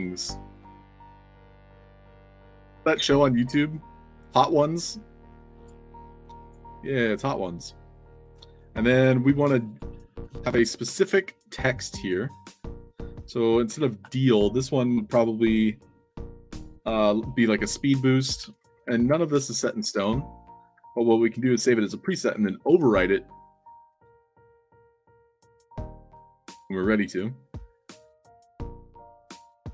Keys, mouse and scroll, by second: 0.0-0.3 typing, 0.9 click, 5.5 click, 6.3 click, 7.3-7.8 scroll down 2, 8.4 click, 9.6 click, 12.8 click, 18.9-20.4 typing, 25.5-26.4 typing.